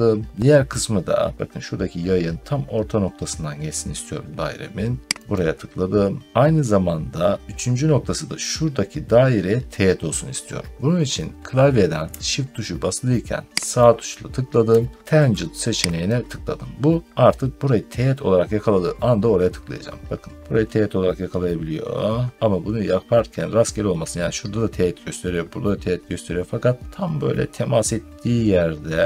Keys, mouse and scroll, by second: 0.6 middle click, 0.9 scroll down 2, 5.2 click, 11.9 click, 13.7 shift+right click, 15.9 click, 19.8 middle click, 22.7 middle click, 27.2 scroll.